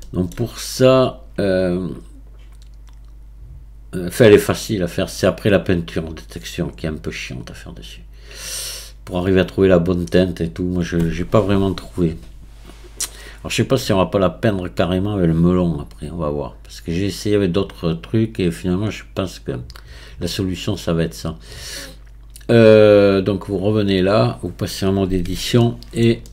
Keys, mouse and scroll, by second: 23.3 click, 25.4 Tab, 25.6-26.3 middle drag.